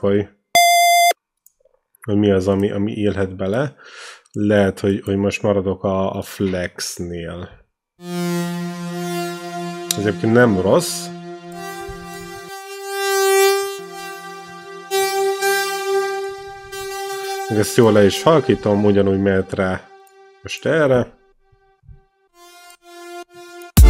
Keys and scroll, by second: 0.5 r, 7.8 v, 8.7 r, 11.3 t, 18.8 ctrl+l, 21.2 4, 22.1 r, 23.5 space.